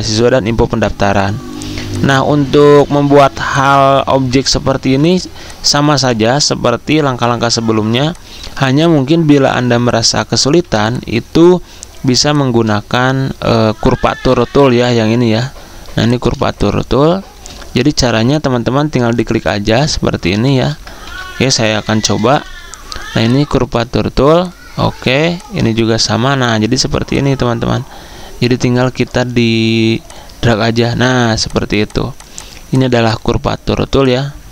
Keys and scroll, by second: 1.7 z, 3.2 v, 9.3-10.6 typing, 20.9 ctrl+a, 21.9 ctrl+2.